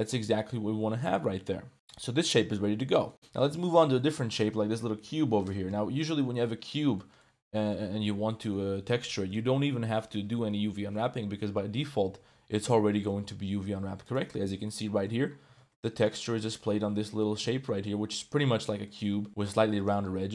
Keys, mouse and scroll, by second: 0.3 middle click, 1.1 ctrl+s, 2.1 Tab, 2.9 shift+click, 3.1 click, 3.1 a, 3.6 shift+click, 4.0 click, 5.0 l, 5.6 KP_Decimal, 6.5 click, 6.7 middle click, 8.0 middle click, 9.0 middle click, 11.0 middle click, 11.8-13.1 middle drag, 13.6 u, 14.4 Tab, 14.6-15.0 middle drag, 15.1 Tab, 15.4 g, 16.5 shift+middle click, 16.9 Tab, 17.1 middle click, 17.5 shift+click, 17.9 Tab, 18.8 click, 19.4 Tab.